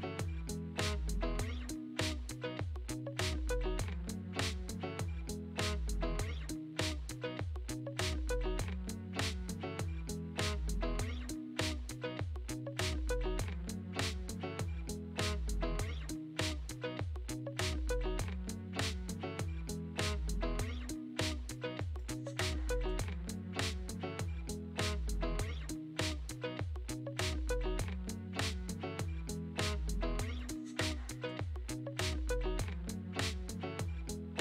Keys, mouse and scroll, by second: 0.4 Tab, 0.6-1.6 right drag, 1.6 g, 3.1 shift+a, 6.1 click, 7.0 Tab, 7.7 Tab, 8.2 shift+a, 12.5 Tab, 13.0-15.4 right drag, 15.5 Tab, 15.8 right click, 16.7 g, 19.1 r, 22.8 scroll down 2, 23.1-24.0 scroll up 1, 24.0-24.5 scroll up 1, 24.5-31.7 drag, 32.1 click, 32.8-34.4 drag.